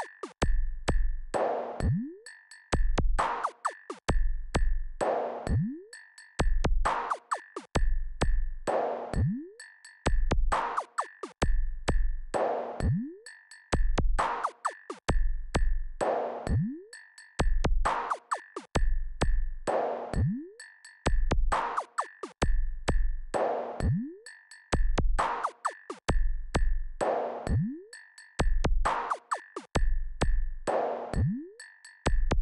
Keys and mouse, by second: 10.5 click, 14.9 click, 26.2 KP_6, 26.4 KP_6, 26.6 KP_6, 26.8 KP_6, 28.7 KP_4, 28.8 KP_4, 29.0 KP_4, 29.3 KP_4.